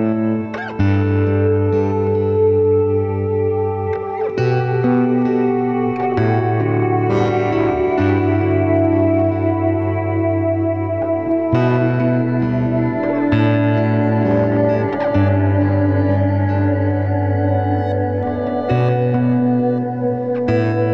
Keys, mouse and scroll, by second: 0.7 scroll down 2, 0.9 s, 1.8 scroll up 1, 2.1-2.5 middle drag, 2.5-3.1 scroll up 3, 3.2 middle click, 3.9-4.7 shift+middle drag, 4.7 click, 5.0-5.3 scroll up 1, 5.3-6.0 middle drag, 6.0-6.5 scroll up 1, 6.5 click, 6.8-7.3 middle drag, 7.3-8.4 scroll up 8, 7.7 middle drag, 8.4 middle click, 9.3 scroll down 1, 9.6-9.9 middle drag, 9.9-10.6 scroll up 1, 10.6 shift+click, 10.8 scroll down 2, 11.0 middle click, 11.9 g, 15.0-15.4 scroll down 1, 15.4 shift+middle click, 15.8 scroll down 1, 16.0-16.4 middle drag, 16.4 scroll up 1, 16.6-17.1 middle drag, 17.1 click, 17.5 shift+drag, 18.1 g.